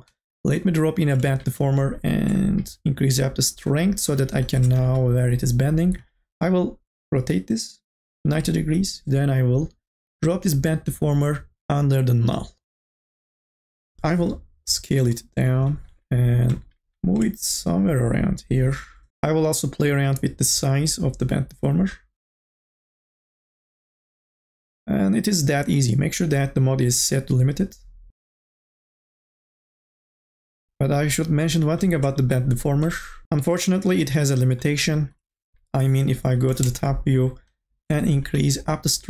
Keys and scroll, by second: 4.8 r, 14.0 t, 15.6 e, 36.2 n, 36.6 a.